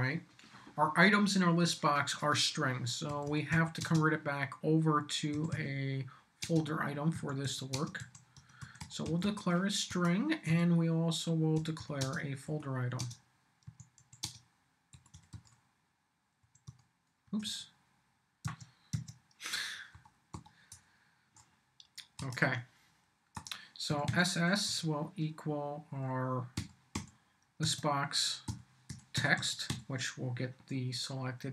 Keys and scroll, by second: 2.8-4.0 typing, 5.3 s, 6.4-17.3 typing, 9.9 Return, 18.4 Tab, 19.9 Up, 20.7 Return, 22.2 Return, 23.3 Return, 23.9 s, 24.7 =, 26.6 l, 26.9 b, 27.6 Tab, 28.2-30.2 typing.